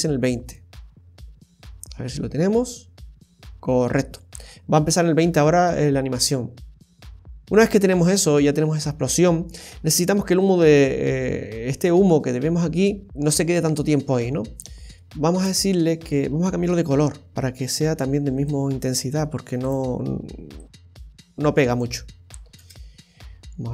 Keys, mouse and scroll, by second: 9.2-10.0 scroll up 2, 15.3 space, 16.6-17.9 scroll down 10, 18.4 right click, 19.6 click, 22.5 space.